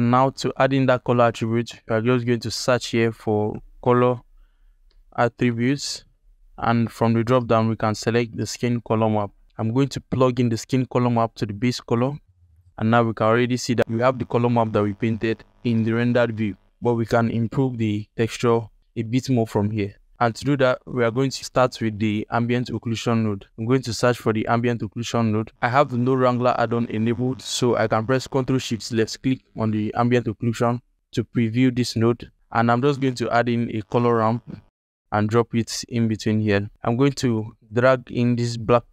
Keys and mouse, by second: 0.5 middle click, 0.6 click, 1.6 click, 2.2 shift+a, 5.2 t, 7.3-8.4 drag, 8.8 ctrl+alt+click, 9.4 alt+shift+click, 10.1-11.6 drag, 12.2 click, 13.1-13.4 ctrl+alt+middle drag, 19.8 ctrl+alt+middle click, 20.3 alt+click, 22.0 shift+a, 30.0 click, 32.0 click, 32.7 shift+a, 38.6-38.9 drag.